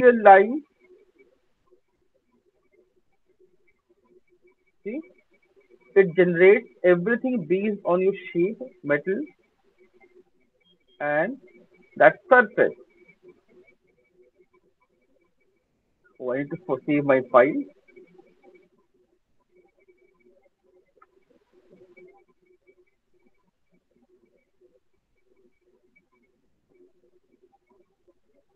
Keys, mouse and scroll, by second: 0.4 alt+click, 3.5 click, 6.0 alt+click, 8.6 click, 10.2 alt+scroll, 10.7 alt+middle click, 11.2 alt+middle click, 11.7 alt+click, 14.7 click, 15.5 alt+click, 20.8 ctrl+s, 22.7 click, 23.3 click, 23.4 alt+click, 24.9 click, 25.3 click, 26.5 click, 26.7 click, 27.3 click, 28.1-28.5 typing.